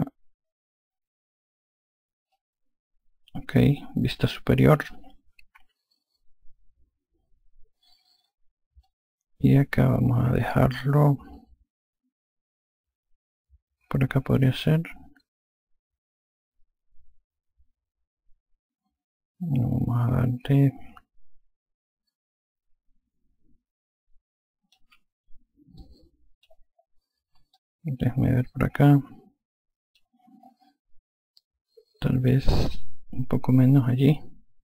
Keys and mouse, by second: 2.3 click, 5.5 F2, 8.8 click, 24.7 F1, 25.7 alt+click, 27.5 alt+click, 32.4 click, 33.7 alt+click.